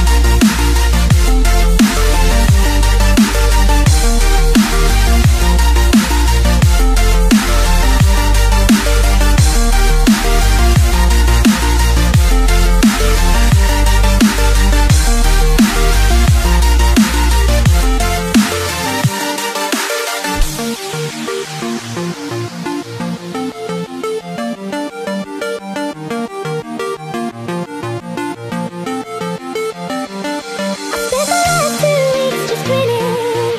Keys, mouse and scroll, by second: 0.0 click, 4.2-4.6 scroll down 3, 4.6 click, 6.9 KP_1, 27.9-29.5 scroll up 8, 29.5 click, 30.3 click.